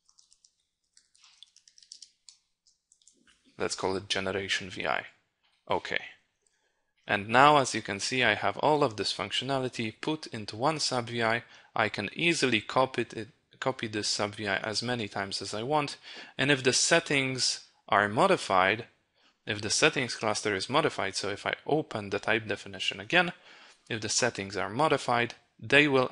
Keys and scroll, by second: 8.3 ctrl+e.